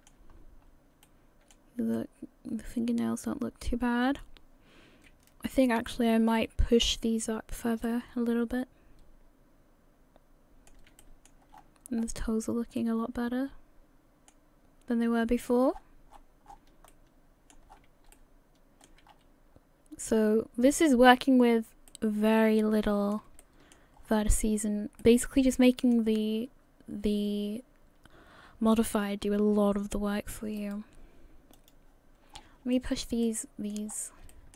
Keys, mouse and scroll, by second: 0.4 scroll up 2, 1.0 shift+middle click, 1.9 middle click, 7.8 middle click, 11.0 shift+middle click, 11.5-12.5 scroll up 13, 12.8 middle click, 15.7-16.8 scroll down 22, 16.9 shift+middle click, 17.7 scroll up 7, 18.1 shift+middle click, 19.1 scroll up 2, 19.6-20.0 scroll down 1, 20.6-21.9 scroll down 9, 21.9 middle click, 23.4 shift+middle click, 24.0-24.5 scroll up 6, 24.5-24.9 scroll down 2, 25.0 middle click, 30.1-30.6 scroll down 2, 30.6 right click.